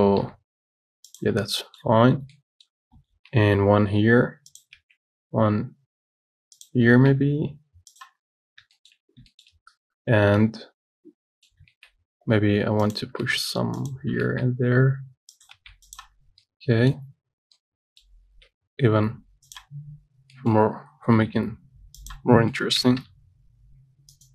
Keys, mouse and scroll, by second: 0.5 g, 1.6 scroll down 6, 1.8-3.4 middle drag, 3.4 shift+d, 5.0 shift+d, 8.5-9.0 scroll down 3, 9.0 shift+middle click, 9.3 scroll up 2, 9.6-12.0 shift+middle drag, 12.0 shift+d, 13.5 shift+d, 16.4 scroll down 1, 16.7 middle click, 17.4-17.8 scroll down 1, 17.8 middle click, 18.5 shift+d, 20.0 scroll up 4, 20.6 shift+middle click, 21.0 scroll up 2, 21.4 g, 22.8 middle click, 23.0 g.